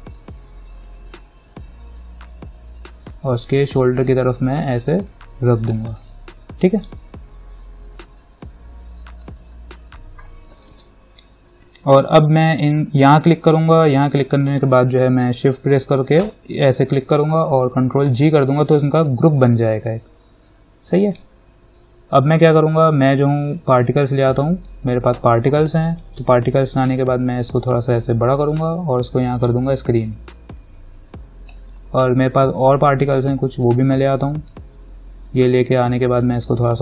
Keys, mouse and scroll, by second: 0.4-4.5 alt+drag, 4.5-9.6 alt+drag, 9.6 ctrl+z, 12.7 click, 16.4 shift+click, 18.3 ctrl+g, 19.2 click, 23.0-26.3 drag, 24.9-26.1 drag, 26.3 ctrl+-, 28.2 alt+click, 35.9-36.8 alt+drag.